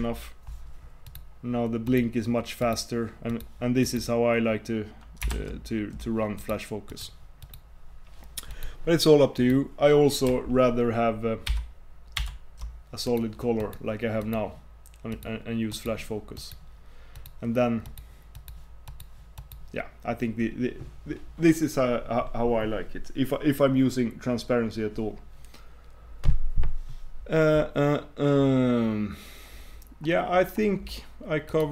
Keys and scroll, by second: 5.4 super+Tab, 11.6 super+2, 12.4 super+1.